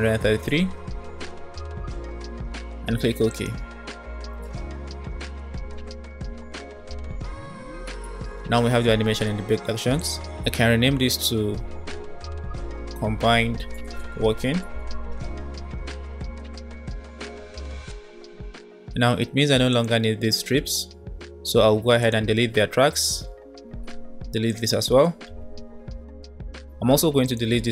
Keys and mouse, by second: 8.2 click, 10.0-15.3 drag, 11.0 BackSpace, 11.1 BackSpace, 12.0 Left, 12.1 Left, 12.2 Left, 12.3 Left, 19.9-20.9 drag, 23.6 Delete, 23.7 Delete, 24.3 click, 25.3 Delete, 27.2 click.